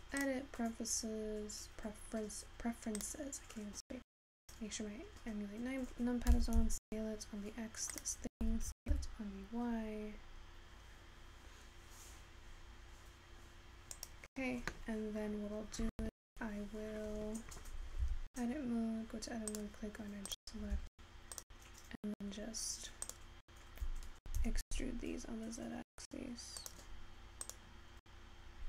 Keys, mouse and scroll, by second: 0.0-0.9 scroll up 3, 0.9-10.1 drag, 10.1 s, 25.4 e.